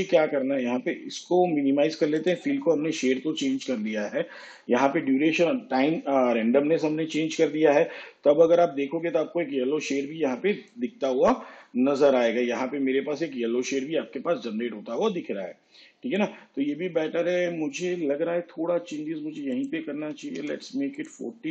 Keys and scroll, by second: 20.1 4, 20.4 0.